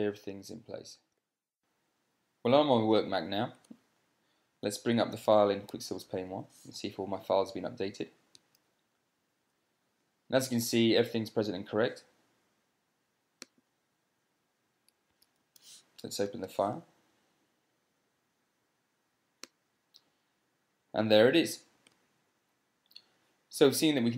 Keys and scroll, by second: 1.4 super+space.